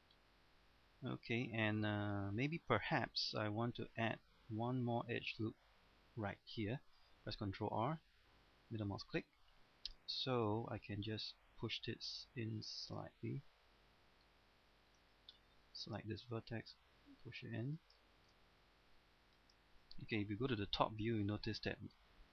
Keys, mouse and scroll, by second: 0.0 scroll down 1, 0.2 middle click, 1.5 scroll up 1, 1.7 middle click, 2.5 scroll down 1, 2.8-5.8 middle drag, 7.3 ctrl+r, 8.8 middle click, 10.3 right click, 11.2-13.0 drag, 13.3 middle click, 14.7 scroll up 1, 14.9 shift+middle click, 15.6 right click, 16.0 middle click, 16.6 click, 18.0 shift+middle click, 20.5 KP_7, 21.2 scroll down 1, 22.0 shift+middle click.